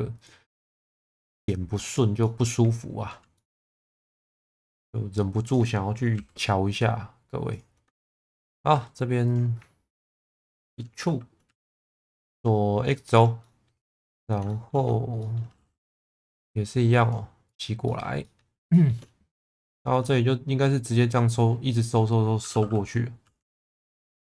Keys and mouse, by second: 2.2 middle click, 3.4-5.2 middle drag, 5.5 click, 6.2 shift+v, 7.5 click, 8.0 shift+middle click, 8.6 2, 10.0 ctrl+click, 11.5 e, 12.0 x, 13.0 click, 13.4 middle click, 14.5 shift+middle click, 15.2 middle click, 16.0 g, 16.1 b, 17.5 click, 17.9 middle click, 18.3 shift+middle click, 18.7 shift+middle click, 19.5 1, 19.7 click, 20.1 middle click, 23.2 g, 23.4 b.